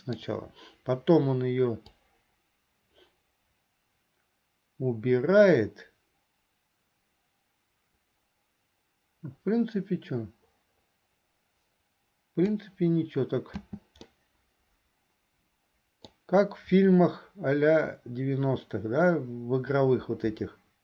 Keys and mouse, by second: 2.1-12.7 drag, 13.7 space, 14.3-16.2 middle drag.